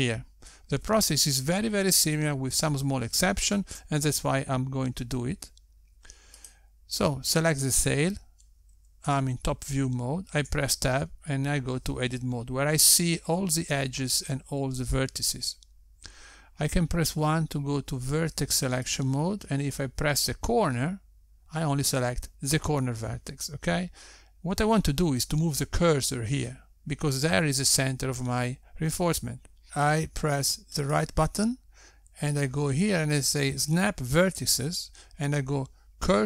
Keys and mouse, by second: 9.0 click, 12.9 Tab, 19.5 1, 21.5 click, 33.3 right click.